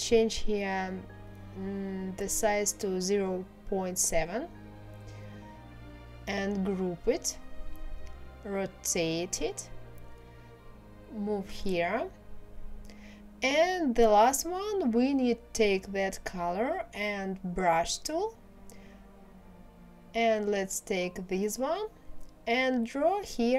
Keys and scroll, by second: 1.0 KP_0, 1.3 KP_Decimal, 1.8 KP_7, 2.1 Return.